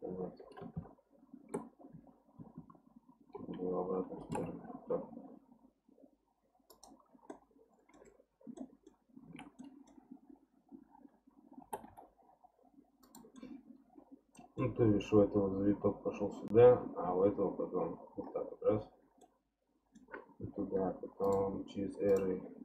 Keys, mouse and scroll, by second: 0.7 ctrl+KP_3, 1.9 KP_1, 2.6 ctrl+KP_1, 4.2 g, 7.3-9.3 middle drag, 9.3 alt+z, 9.6-11.6 middle drag, 11.6 g, 13.4-16.4 middle drag, 19.2-21.2 middle drag, 21.2-22.6 drag.